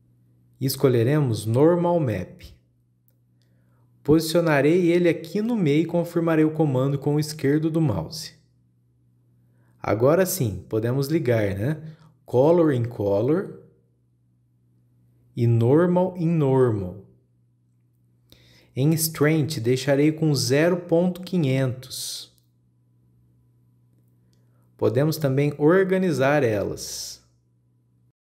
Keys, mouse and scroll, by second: 9.5-9.8 scroll up 2, 9.8-10.9 middle drag, 10.9 click, 11.9 click, 15.6 click, 18.9 scroll up 2, 19.2-20.6 middle drag, 20.6-23.6 drag, 24.8-27.7 drag.